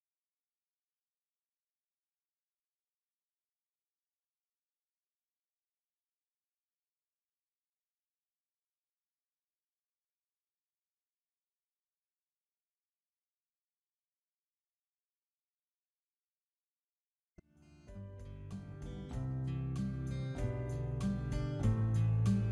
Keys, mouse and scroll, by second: 0.5-1.7 middle drag, 1.7-2.3 drag, 2.3-3.4 scroll up 1, 3.4 scroll up 1, 3.6 middle click, 4.1 right click, 4.4-5.0 middle drag, 5.0-5.5 drag, 6.5-9.8 middle drag, 11.7-14.6 middle drag, 14.6-15.6 drag, 17.3 middle drag, 18.3-19.9 middle drag, 20.2 click, 21.5-22.0 middle drag.